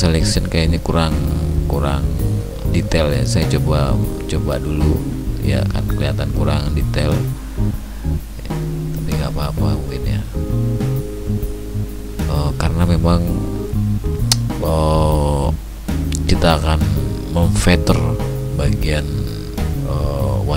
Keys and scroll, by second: 15.0 ctrl+alt+d, 18.4 ctrl+shift+i.